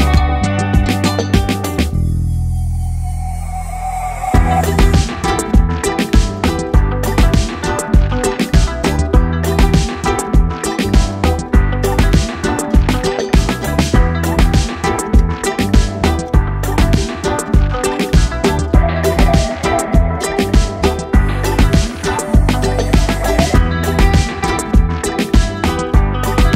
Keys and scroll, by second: 0.4-2.7 typing, 7.6 ctrl+shift+[, 7.8 Return, 8.0 ctrl+shift+[, 10.0 Return.